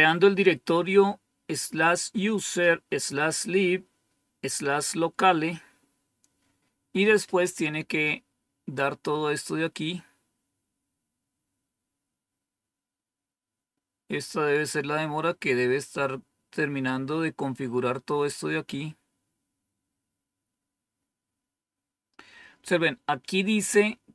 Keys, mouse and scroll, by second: 13.3 scroll down 2, 17.1 scroll down 2, 18.9-24.1 scroll down 2.